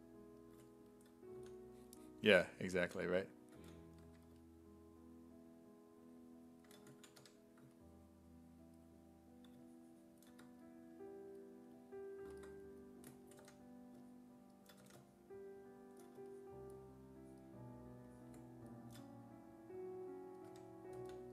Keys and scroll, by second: 1.4-4.1 typing, 6.8-7.7 typing, 14.8 w, 20.3-21.3 typing.